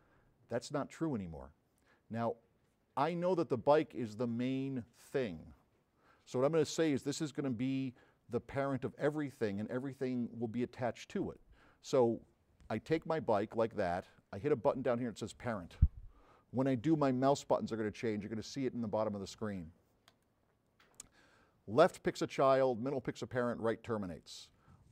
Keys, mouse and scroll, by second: 0.6-2.5 drag, 3.2 click, 4.3-5.3 drag, 9.8 click, 11.3 click, 13.1-15.3 drag, 20.1 click.